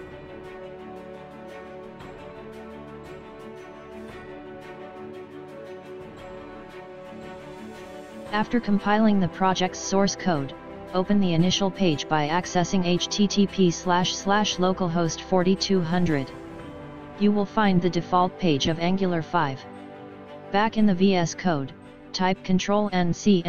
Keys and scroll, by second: 22.3 ctrl+c.